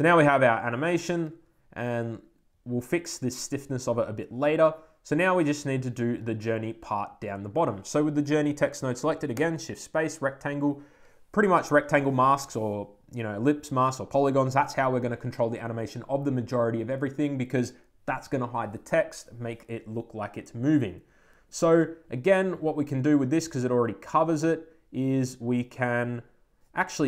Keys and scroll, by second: 10.8 Return.